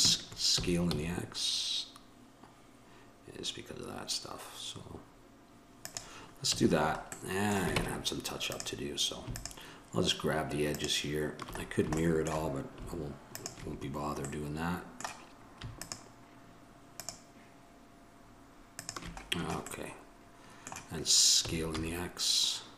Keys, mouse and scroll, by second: 6.7 a, 6.9-9.5 middle drag, 8.0 ctrl+Tab, 9.5-11.8 drag, 11.8-22.7 middle drag.